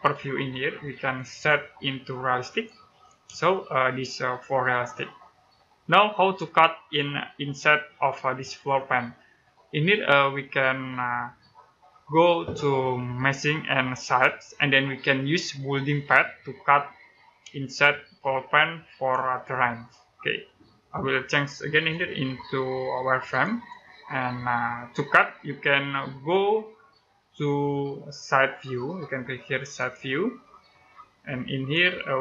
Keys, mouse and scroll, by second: 0.8 click, 3.3 middle click, 6.3-7.9 scroll up 1, 9.3-11.5 scroll down 1, 13.8 click, 17.5 middle click, 19.1 middle click, 21.6 click, 27.6-29.2 scroll up 1, 29.2 scroll up 1, 29.4 click, 31.9 right click, 32.1 scroll up 1.